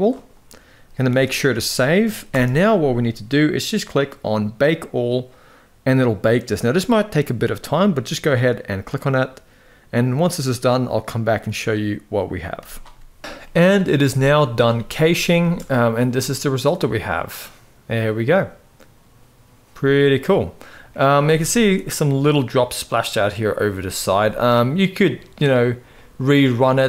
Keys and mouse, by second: 0.8 ctrl+s, 1.2 ctrl+s, 1.9 shift+Left, 12.2 click, 13.2 middle click, 13.8 z, 14.7 middle drag, 15.1 space, 15.8-16.4 middle drag, 20.1-20.7 middle drag, 21.4 shift+middle click, 24.1-24.7 middle drag, 25.8-26.4 middle drag.